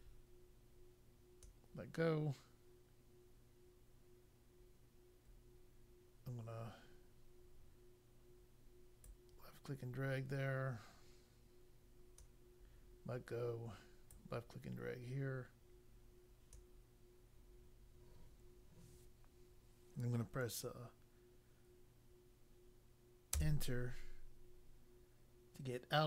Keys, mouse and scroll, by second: 9.0 click, 14.1 click, 23.3 Return.